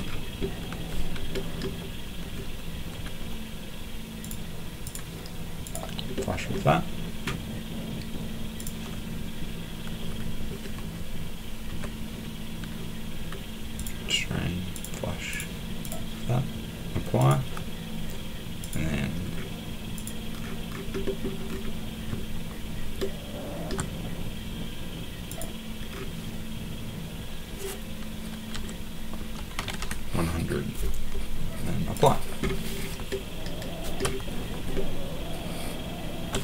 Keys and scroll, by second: 11.7 Escape, 28.5-30.1 typing.